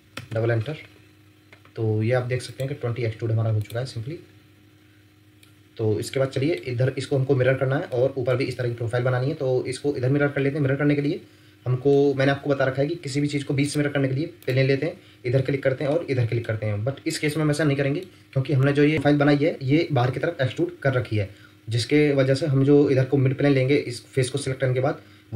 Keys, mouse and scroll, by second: 0.1 Return, 0.4 Return, 4.1-4.8 scroll up 1, 4.8-5.4 scroll down 1, 5.4 middle click, 9.4-10.4 scroll up 1, 10.4 middle click, 15.9 middle click, 18.0-18.9 scroll down 1, 20.7 scroll up 1, 21.3-23.7 scroll down 1.